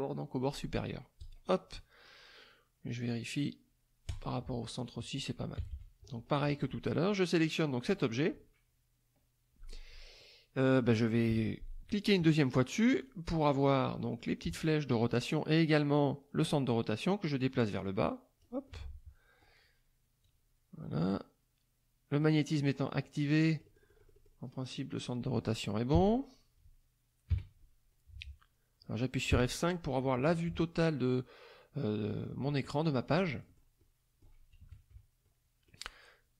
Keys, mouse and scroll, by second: 1.2 click, 4.1 click, 4.8 click, 5.6 KP_Subtract, 6.3 middle click, 7.8 click, 10.2-10.7 middle drag, 11.3 KP_Subtract, 13.0 click, 13.9 middle click, 17.8 click, 18.7 middle click, 20.2-22.3 drag, 23.0-24.4 middle drag, 25.9 KP_3, 26.6 KP_Subtract, 27.3 KP_5, 29.3 KP_5, 32.8 click, 33.8 click, 34.6 KP_Subtract, 35.2 click.